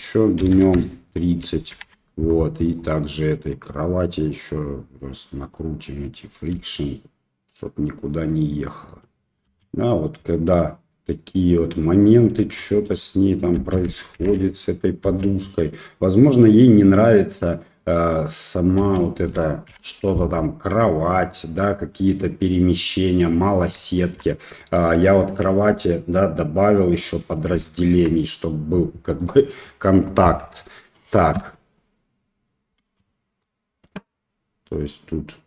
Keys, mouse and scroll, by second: 1.7 shift+Left, 2.6 click, 4.3 click, 5.5 click, 6.6 space, 8.1-8.8 middle drag, 9.6 space, 10.2-11.2 middle drag, 11.9 middle click, 12.4 space, 13.7 space, 14.2 shift+Left, 15.0 space, 18.3-18.6 middle drag, 18.6 click, 18.8 space, 19.7 shift+Left, 20.3 drag, 20.5 middle click, 21.9 click, 23.4 middle drag, 23.8 shift+middle drag, 24.5 click, 24.9 Tab, 27.9 Tab, 29.2 click, 31.3 space, 32.8 space, 33.4-33.9 middle drag, 35.1-35.4 drag.